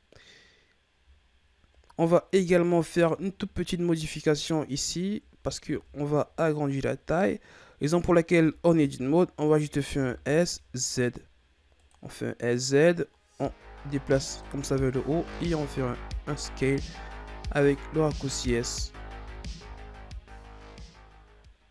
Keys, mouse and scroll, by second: 1.3-4.1 ctrl+scroll up 13, 4.4 right click, 4.9-5.7 ctrl+scroll up 7, 5.7 Tab, 6.2-8.4 ctrl+scroll up 2, 8.4 Tab, 8.8 Tab, 9.8 s, 12.7-15.1 drag, 15.1 s, 19.0 scroll down 4, 19.2 Tab, 19.6 a, 19.9 scroll down 5.